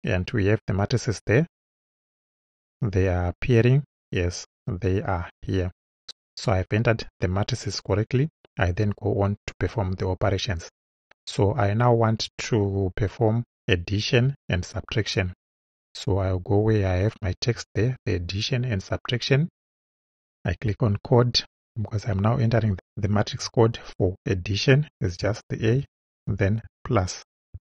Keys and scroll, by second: 17.4 Return, 25.6 shift+a, 26.6 shift+=.